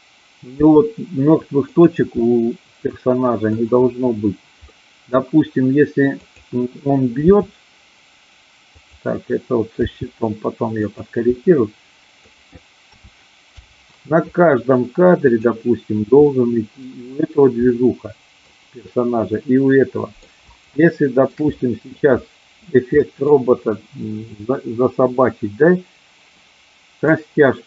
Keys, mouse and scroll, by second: 0.5 g, 1.6 click, 2.2-3.6 middle drag, 4.7 scroll up 1, 4.7 middle click, 7.3 r, 8.7 click, 9.9 g, 10.9 click, 11.3-12.3 middle drag, 13.5 i, 15.2 click, 16.2-16.9 middle drag, 17.7 middle click, 19.3-20.3 middle drag, 20.7-21.3 shift+middle drag, 21.5 middle click, 23.0-23.3 middle drag, 27.0-27.6 drag.